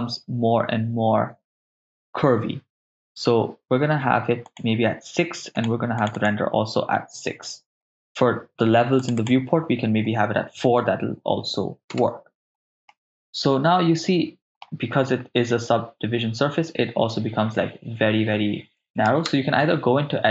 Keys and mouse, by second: 4.5-4.9 drag, 5.6 click, 9.0 click, 12.0 KP_0, 12.9-14.6 middle drag, 19.3 Tab.